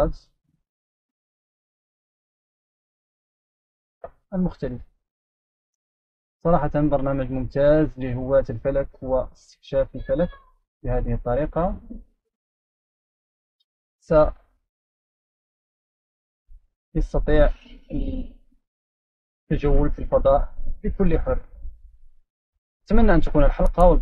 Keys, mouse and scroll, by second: 0.4 right click, 1.1 right click, 2.3 right click, 3.4 right click, 4.9 right click, 6.1 click, 11.0-12.5 right drag, 13.3-14.0 scroll down 2, 14.0-14.8 scroll up 2, 15.0 click, 15.8 click, 17.3-18.3 scroll down 1, 18.4 click, 19.3-21.3 scroll down 1.